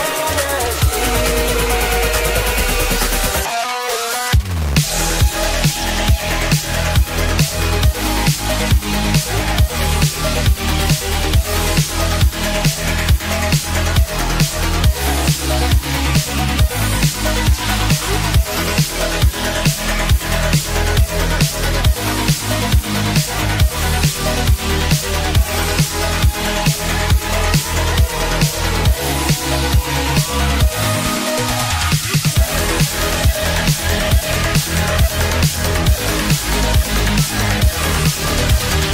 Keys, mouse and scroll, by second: 3.0 middle click, 9.7 middle click, 35.4 z.